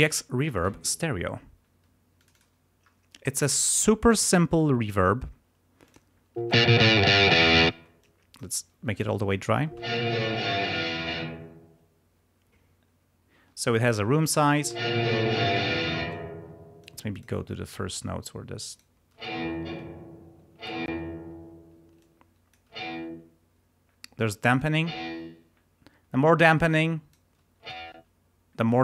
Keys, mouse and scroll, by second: 0.5 click, 2.2 click, 3.6 click, 4.2 right click, 5.8 click, 6.4 space, 7.7 space, 8.0 click, 9.7 space, 11.1 space, 13.8 click, 14.6 space, 16.0 space, 16.8 click, 18.7 click, 19.0 space, 20.5 space, 21.9 click, 22.7 space, 24.1 click, 24.8 space, 26.6 click, 27.6 space.